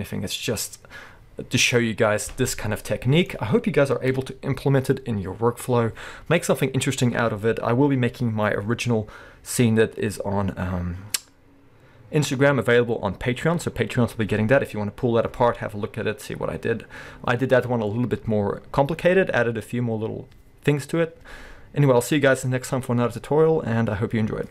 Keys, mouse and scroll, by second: 4.1 KP_1.